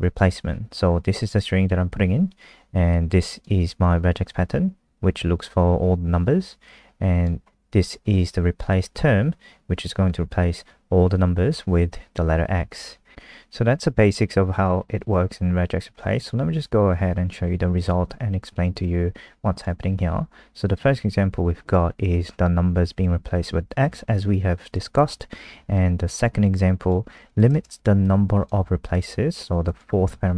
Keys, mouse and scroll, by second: 1.3 click, 2.9 click, 16.3 F5, 17.9 click.